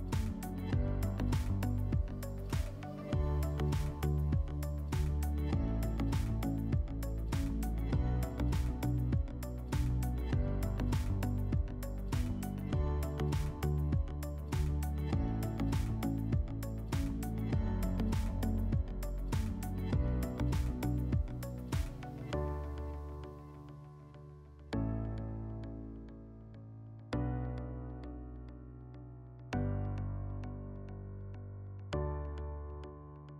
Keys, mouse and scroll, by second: 8.0 click, 9.3 click, 10.5 click, 12.0-15.4 drag, 16.0 click, 16.7 click, 18.1-19.6 drag, 26.1 click, 32.0 F4.